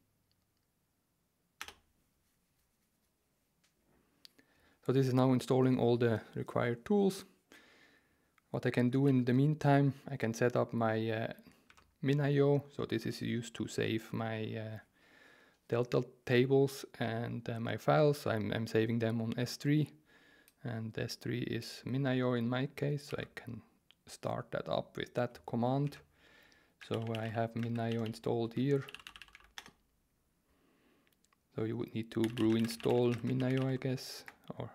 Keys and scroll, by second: 1.6 Return, 8.9 ctrl+t, 11.7 alt+2, 23.1 super+c, 25.8 alt+1, 26.6-29.8 typing, 32.0-34.7 typing.